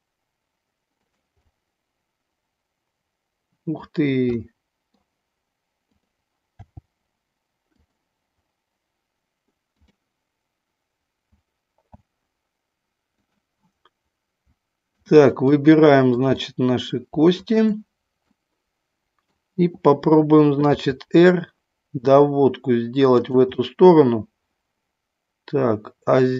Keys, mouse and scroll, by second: 1.0 click, 1.4-3.7 middle drag, 4.4 middle click, 6.0 click, 6.6 g, 7.7 click, 9.7 click, 11.3 a, 11.9 a, 13.3 click, 16.0 middle click, 16.5 middle click, 17.2 shift+click, 18.2-19.4 middle drag, 20.7 r, 23.1 click, 23.6-26.3 middle drag.